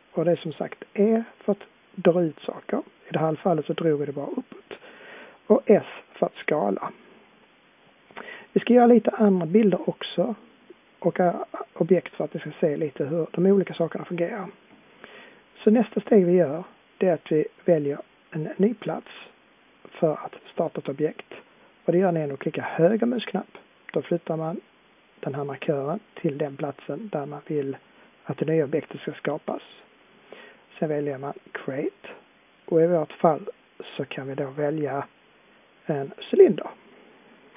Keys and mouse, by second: 23.4-28.7 drag, 36.3-37.5 drag.